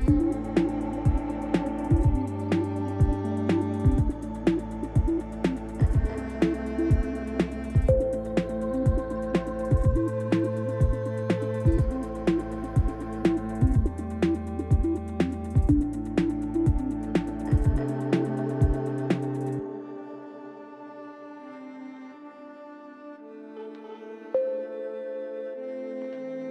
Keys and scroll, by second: 0.5 f, 1.2 shift+z, 1.9 Escape, 2.5 f, 2.9 shift+z, 5.1 3, 6.4 u, 9.0 r, 10.5 Tab, 14.3 Tab, 20.7 1, 23.3 j.